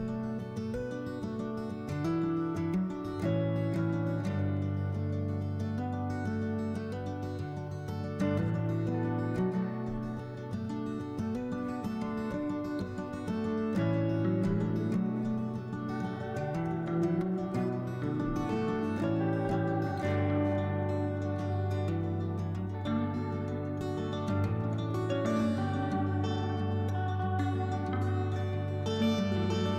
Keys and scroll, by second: 6.5-8.4 typing, 9.7 3, 11.9 s, 12.6 s, 13.9 s, 17.1 3, 18.8 s, 21.4 s, 23.2-24.1 typing, 26.2 s, 27.0 alt+s, 28.6 s.